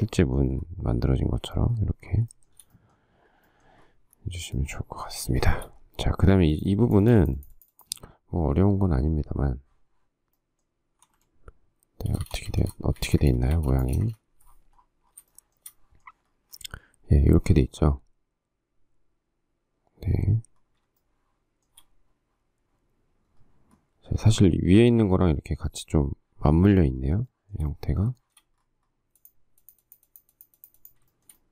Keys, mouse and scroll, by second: 2.5 shift+middle click, 5.6 shift+middle click, 11.2 alt+Tab, 12.3 space, 12.4 Escape, 12.7 Escape, 13.0 space, 13.2 Escape, 13.6 space, 13.7 Escape, 14.2 space, 14.2 Escape, 15.5 shift+middle click, 21.2 shift+middle click, 27.5 shift+middle click, 28.4 shift+middle click, 31.3 shift+middle click.